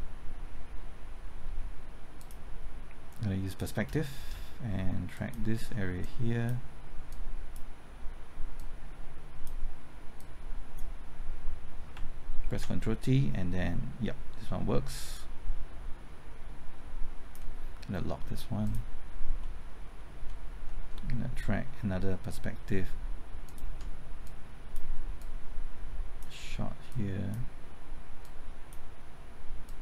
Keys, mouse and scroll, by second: 2.2 click, 4.3 typing, 5.1 ctrl+click, 6.0 click, 7.1-11.3 drag, 13.0 ctrl+t, 15.1-17.3 drag, 19.4 middle click, 23.4 ctrl+click, 24.2-29.3 drag.